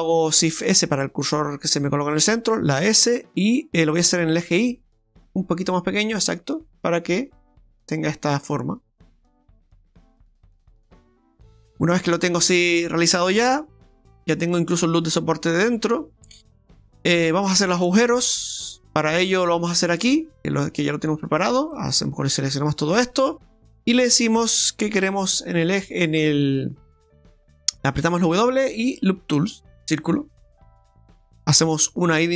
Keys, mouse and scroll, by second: 0.6 shift+s, 2.8 s, 11.2 middle click, 12.7 middle click, 13.8 Tab, 14.5 middle click, 15.7 middle click, 17.9 Tab, 21.4 right click, 21.8 shift+right click, 22.1 right click, 22.7 right click, 28.3 w, 28.9 w, 31.8 i.